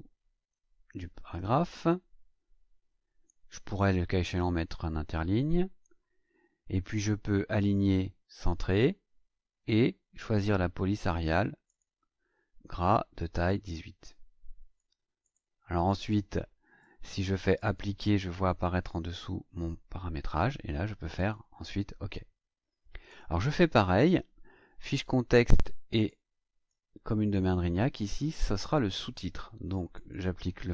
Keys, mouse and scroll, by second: 0.5 KP_2, 1.2 Delete, 7.6 click, 11.6 click, 13.6-15.0 drag, 15.2 click, 16.0-17.0 drag, 17.5 click, 21.1 click, 23.0 click, 26.0 click, 28.6 click, 29.9 click.